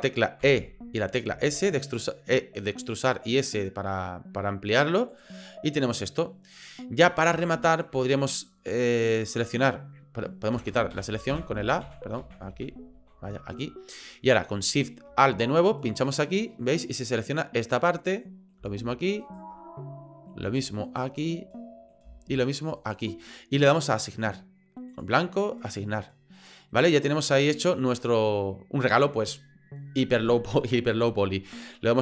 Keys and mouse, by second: 0.4 e, 5.5-6.7 drag, 7.4 shift+click, 9.1 right click, 10.6-13.0 typing, 16.8-18.5 middle drag, 19.2 alt+shift+click, 19.6 middle click, 20.8 alt+shift+click, 21.2 middle click, 22.8 alt+shift+right click, 23.1 middle click, 24.9 click, 25.7 click, 26.4 right click, 26.7 middle click, 27.6-29.1 middle drag.